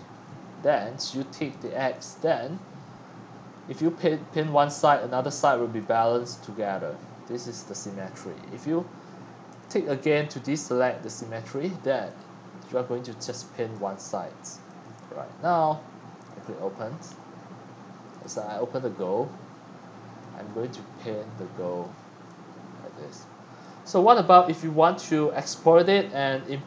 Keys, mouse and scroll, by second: 1.6-2.7 drag, 4.7-11.0 drag, 13.2-15.0 drag, 16.3 click, 17.6-20.1 drag, 22.2-23.9 drag, 23.9-24.3 scroll up 5, 24.3-25.1 scroll down 4, 25.1-26.6 drag.